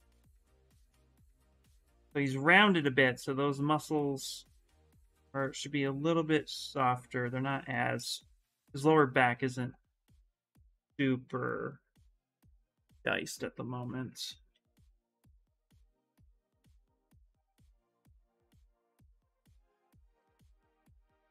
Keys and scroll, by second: 14.3 s, 17.7 s.